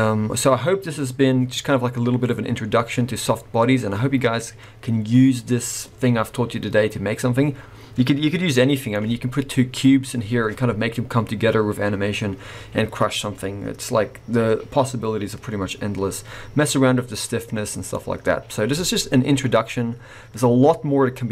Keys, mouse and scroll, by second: 8.5 middle click, 17.5-17.9 scroll down 2, 17.9 middle click.